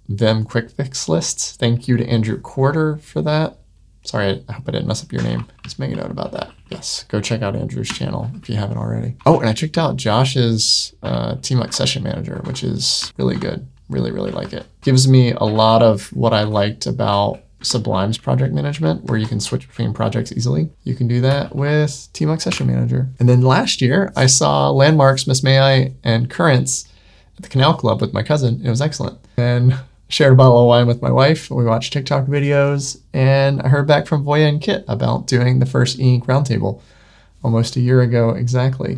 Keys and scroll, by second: 5.5 super+1, 6.7 Escape, 8.1 super+9, 9.6 super+1, 11.5 Tab, 13.2 super+v, 15.5 ↻, 18.0 ↻, 20.7 Tab, 21.3 super+9.